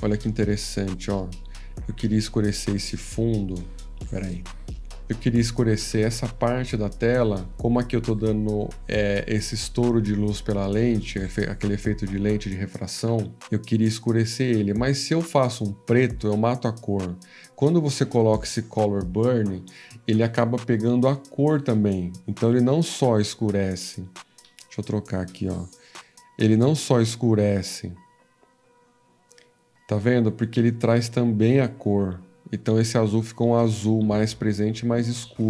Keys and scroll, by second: 24.7 F15, 24.7 *.